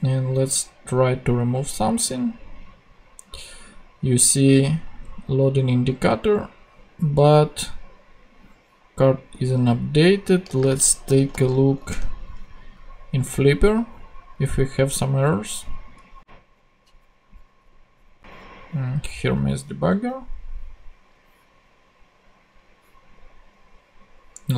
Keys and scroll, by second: 11.0 super+f, 11.1 typing, 11.8 Return, 19.8 super+Tab.